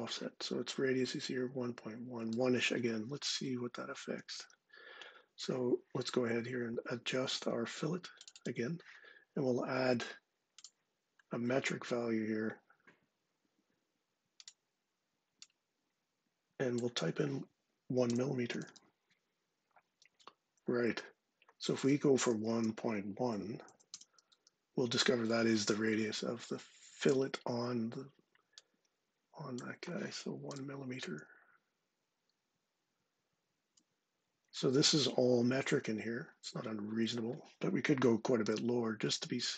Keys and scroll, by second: 3.0 super+Tab, 17.6-18.9 typing, 21.8-24.1 typing, 23.1 Right, 30.2 1, 37.7-38.7 typing.